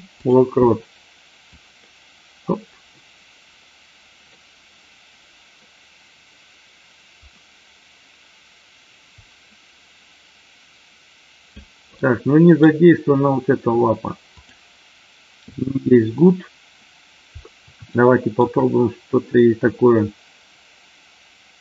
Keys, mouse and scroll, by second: 1.5-11.6 drag, 11.9-12.6 middle drag, 15.4 click, 17.9-18.2 shift+middle drag.